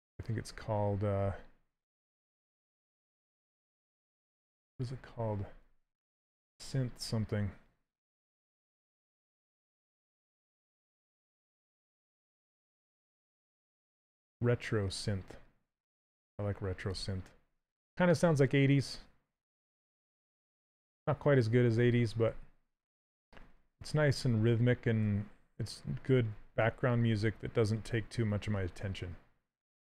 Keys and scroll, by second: 5.8 ctrl+z, 23.3 s.